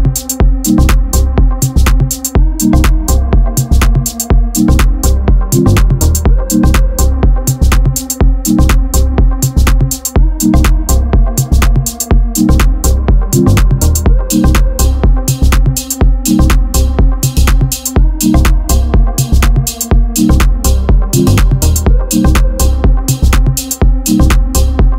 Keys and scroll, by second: 0.2 2, 1.1 e, 3.7 e, 5.4 s, 7.3 e, 9.2 f, 10.4 KP_7, 10.8 1, 11.7 k, 21.0 z, 21.3 a, 23.5 x.